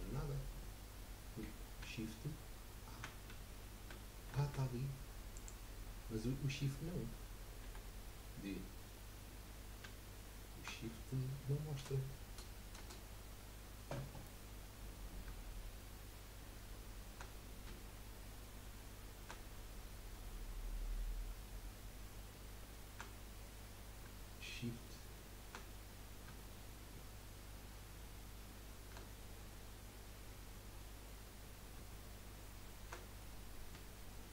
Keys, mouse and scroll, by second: 3.3 a, 3.8 a, 3.9 a, 5.3 click, 6.1-6.5 scroll down 2, 6.5 scroll up 1, 7.7 d, 22.7-24.3 shift+scroll down 1, 27.2 shift+scroll up 1, 27.8-28.2 shift+scroll down 2, 30.2 scroll up 1, 30.9 scroll down 1, 33.2-34.3 middle drag.